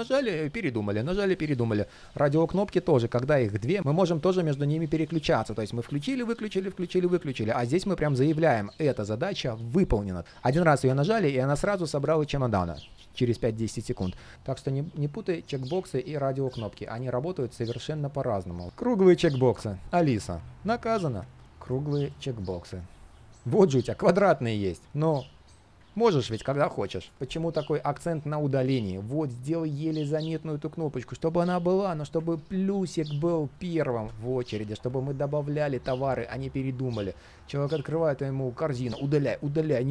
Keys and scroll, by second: 7.1 super+z.